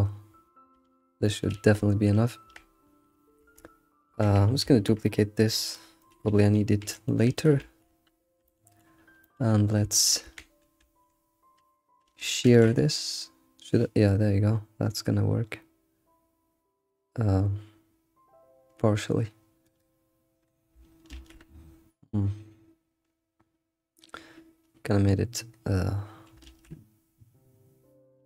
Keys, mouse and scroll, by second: 0.2 scroll down 2, 0.8 alt+shift+z, 1.2 middle click, 2.4 Tab, 3.5 Tab, 4.1 Tab, 4.5-4.8 scroll down 1, 4.8 shift+d, 6.1 click, 6.9 g, 7.6 ctrl+s, 8.5 alt+middle click, 8.7 alt+middle click, 9.3 alt+middle drag, 10.0 shift+middle drag, 10.3 Tab, 10.4 Tab, 10.5 scroll up 4, 10.8 a, 12.4 ctrl+alt+shift+s, 12.5 ctrl+alt+shift+s, 21.1 ctrl+alt+shift+s, 26.5 ctrl+alt+shift+s.